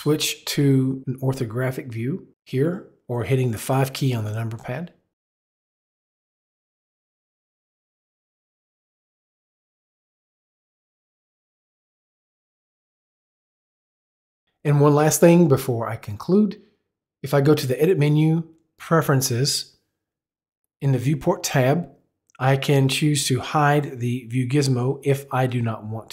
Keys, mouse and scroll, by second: 4.6 click, 5.9 click, 6.5 click, 7.5 click, 8.2 click, 9.1 click, 10.1 click, 10.9 click, 11.2 click, 12.3 click, 16.9 click, 18.5 click, 24.4 click.